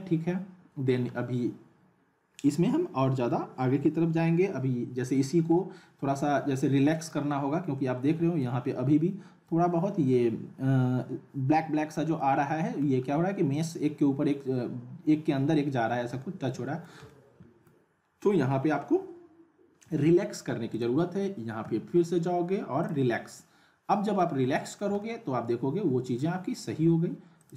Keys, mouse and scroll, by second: 7.4 scroll up 1, 7.7-8.7 alt+middle click, 8.6-10.5 scroll up 1, 10.8-11.4 scroll down 1, 11.8 middle click, 13.0-13.5 scroll up 1, 16.2-17.7 alt+middle drag, 20.7 click, 21.6 r, 22.8 click, 24.2-24.8 middle click, 25.0-26.2 alt+middle drag, 27.4 click.